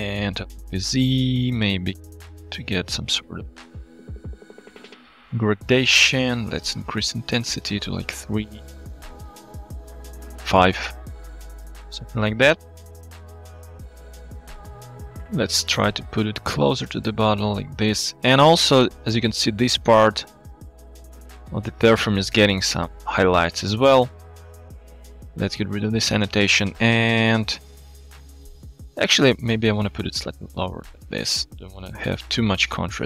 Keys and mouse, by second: 0.4 r, 0.5 z, 6.8 click, 9.2 click, 12.9-13.3 middle drag, 13.3-14.2 drag, 14.9 g, 15.0 y, 18.7 shift+middle drag, 20.0 click, 20.5 click, 21.7 alt+shift+z, 24.4-25.8 ctrl+drag, 26.3 click, 26.8-27.7 drag, 28.7 shift+middle click, 28.8 shift+click, 29.8 g.